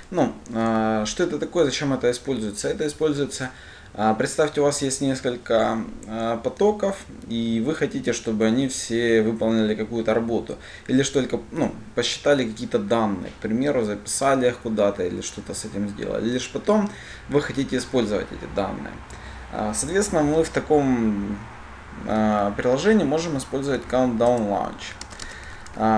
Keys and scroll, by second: 24.7 Return.